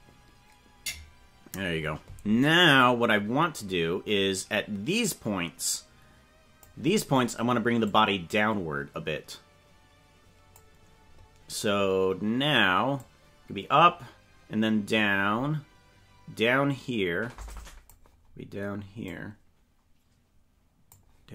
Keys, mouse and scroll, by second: 2.6 click, 5.9 click, 7.9-10.7 drag, 13.0-14.9 drag, 17.5 click, 19.0-20.9 drag.